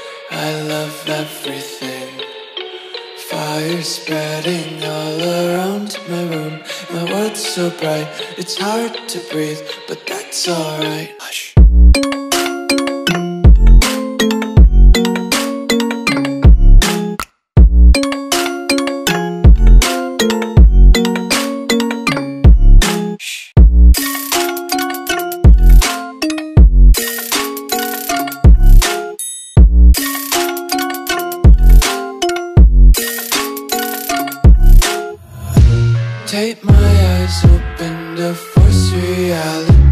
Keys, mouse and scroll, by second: 2.2 click, 5.3 Return, 6.1 a, 6.9 click, 10.3 d, 11.4 s, 16.7 click, 22.9 click, 28.0 click, 32.5 click, 37.7 click.